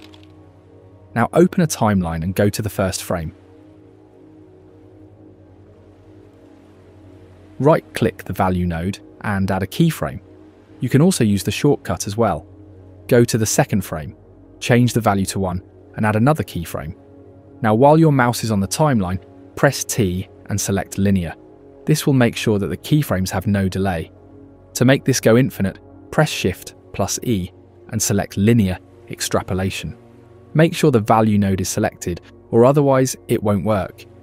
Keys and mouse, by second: 0.0 click, 0.1 ctrl+g, 0.2 click, 0.5 ctrl+s, 0.5 click, 2.3-3.3 drag, 3.6-5.1 drag, 8.1 click, 10.9 Right, 11.9-13.2 drag, 27.6 shift+e, 29.8 Right, 30.4 Right, 30.8 Right, 30.9 Right, 31.0 Right, 31.2 Right, 31.3 Right, 31.6 Right, 31.6 Right, 31.8 Right, 32.0 Right, 32.2 Right, 32.3 Right, 33.0 shift+Left.